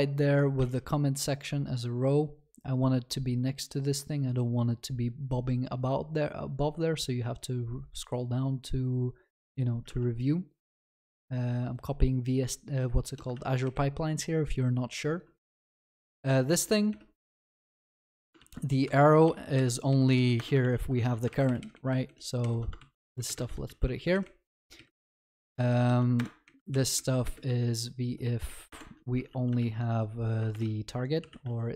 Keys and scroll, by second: 13.4 ctrl+s, 18.5 ctrl+s, 18.8 Escape, 20.3 Escape, 20.7 ctrl+s, 21.3 ctrl+shift+Left, 22.8 ctrl+c, 23.5 ctrl+v, 28.7 Return, 30.5 ctrl+BackSpace.